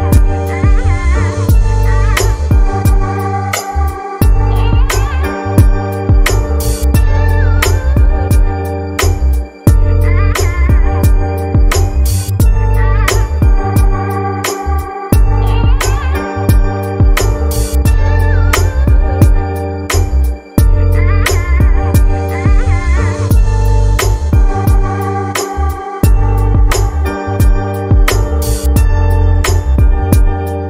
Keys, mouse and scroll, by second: 1.5-4.5 scroll up 2, 5.7-9.2 drag, 11.7-14.2 drag, 14.9-18.6 shift+middle drag, 19.5 click, 20.9-21.6 scroll up 1, 21.6-22.5 scroll up 3, 22.7-23.0 scroll down 1, 26.8 n, 27.2 n, 29.0 click, 29.8 n.